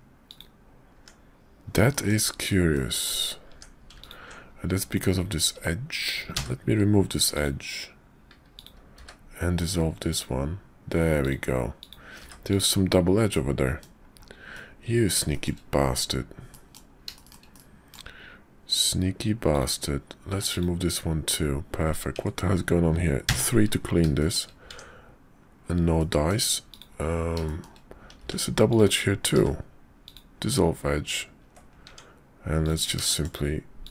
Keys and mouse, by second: 0.9 Tab, 1.9 shift+click, 2.7 click, 3.5 Tab, 4.0 alt+click, 6.3 x, 8.5 click, 9.0 x, 11.2 click, 11.8 click, 12.2 x, 13.3 click, 14.5 middle click, 15.3 shift+middle click, 16.5 middle click, 17.1 shift+click, 17.5 click, 19.5 click, 20.3 x, 22.1 Tab, 23.3 3, 24.2 shift+click, 24.7 Tab, 25.9 click, 26.7 click, 27.4 shift+click, 28.2 x, 29.3 x, 31.8 Tab, 32.6 click, 33.1 shift+click, 33.8 shift+click.